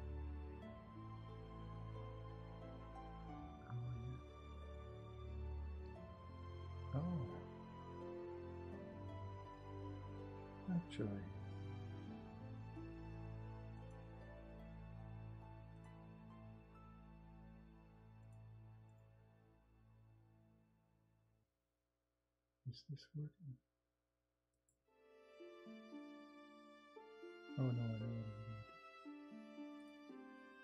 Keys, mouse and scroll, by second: 11.3 ctrl+z.